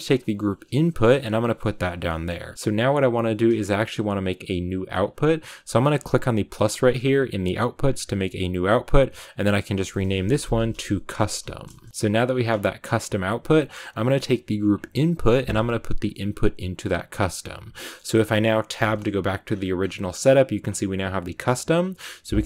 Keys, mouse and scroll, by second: 0.0-1.2 drag, 9.2 Left, 9.4 Left, 10.9-22.4 drag.